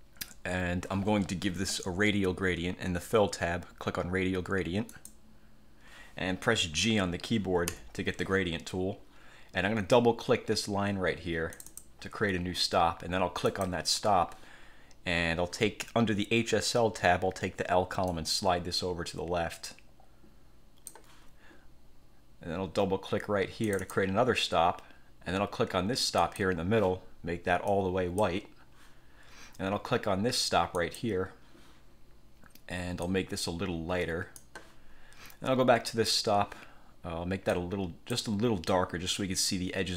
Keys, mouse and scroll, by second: 5.0 click, 7.8 g, 11.7 click, 13.6 click, 18.3-21.3 drag, 23.8 click, 26.3 click, 27.8 click, 30.9 click, 33.2-34.7 drag, 36.0 click, 37.7 click, 38.8 click.